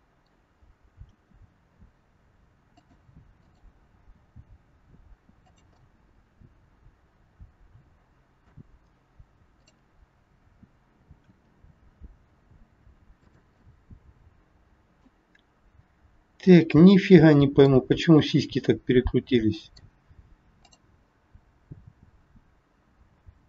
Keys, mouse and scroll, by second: 1.0 r, 3.3 click, 4.2 r, 5.8 middle click, 9.5 click, 11.3 r, 13.6 middle click, 16.4 middle click, 20.6 click, 21.4 r.